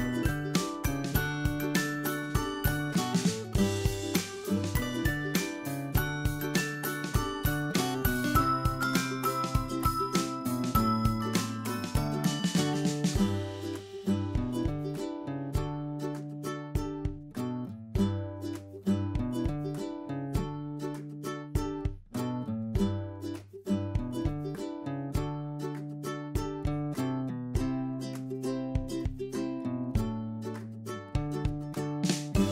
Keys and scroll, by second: 4.2 Left, 5.8 Right, 14.1 ctrl+j.